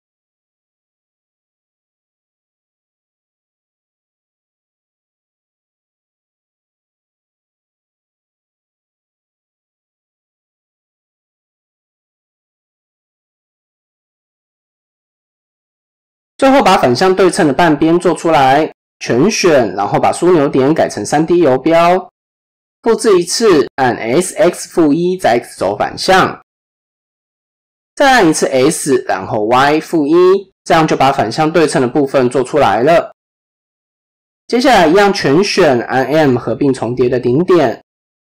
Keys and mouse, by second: 6.5 middle click, 7.5 KP_7, 8.7 middle click, 9.5 KP_7, 10.0 KP_3, 11.1 ctrl+KP_3, 14.0 KP_7, 14.8 click, 15.2 shift+middle click, 16.0 click, 17.3 shift+middle click, 18.6 a, 20.3-21.3 drag, 22.7 shift+d, 23.9 s, 28.8 s, 32.2-33.2 middle drag, 33.7 KP_1, 34.6 a, 35.6 m.